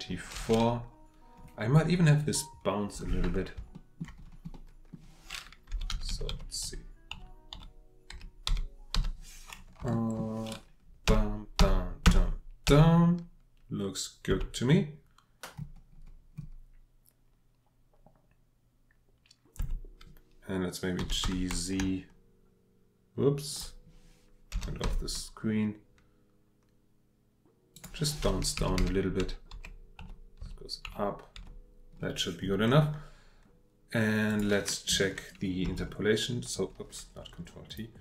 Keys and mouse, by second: 3.7 shift+middle drag, 4.5-4.9 middle drag, 5.7 Left, 5.9 Left, 6.6 Right, 7.1 Right, 7.5 Right, 8.1 Left, 8.5 Left, 9.8 Left, 9.9 shift+drag, 11.1 Right, 11.6 Right, 12.1 Right, 12.7 Right, 14.3 Right, 19.6 Right, 21.0 g, 21.2 z, 24.5 g, 24.8 z, 27.7 click, 28.6 Left, 28.8 Left, 29.5 Left, 30.0 Right, 30.4 Right, 30.9 Right, 31.4 Right, 35.6 ctrl+t, 37.7 click.